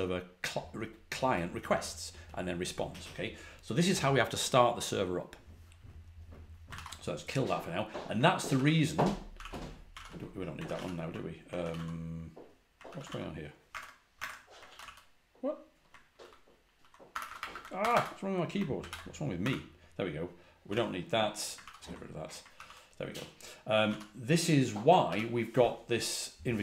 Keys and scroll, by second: 6.6 ctrl+c, 8.4 ctrl+a, 8.5 ctrl+h, 9.2 ctrl+a, 9.3 ctrl+h, 9.8 ctrl+l, 10.5 ctrl+a, 10.6 ctrl+l, 11.5 ctrl+a, 11.6 shift+\, 12.8 ctrl+a, 13.6 super+Tab, 14.1 super+Tab, 14.6 ctrl+a, 14.7 h, 16.1 ctrl+a, 16.4 ctrl+a, 17.3 typing, 18.7 ctrl+a, 19.3 3, 20.3-21.1 typing, 21.5 ctrl+d, 22.5 ctrl+a, 22.5 ctrl+h, 23.7 ctrl+a, 23.8 ctrl+l, 25.0 j.